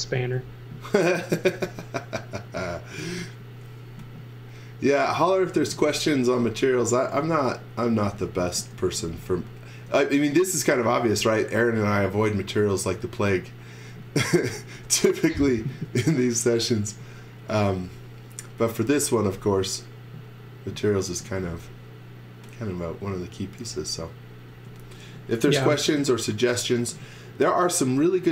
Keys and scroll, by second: 0.0-0.1 typing, 3.2 e, 4.2 e, 5.0 z, 5.5 x, 6.6 e, 8.4 z, 8.7 x, 9.9-11.5 typing, 12.6 e, 14.1-15.8 typing, 16.8 space, 21.2 x, 21.5 v, 24.5 space, 25.5 m.